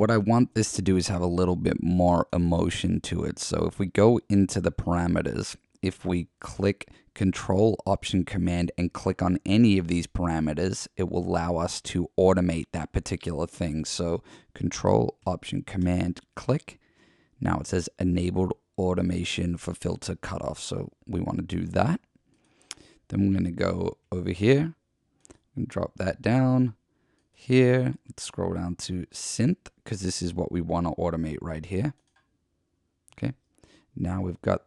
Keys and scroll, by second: 24.1 F1, 33.1 F1.